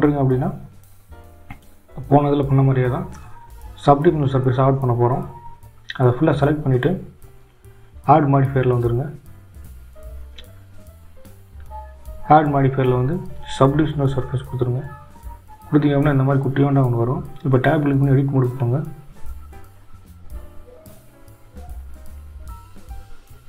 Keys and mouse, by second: 3.9 Tab, 6.1-9.0 drag, 21.9-23.4 right drag.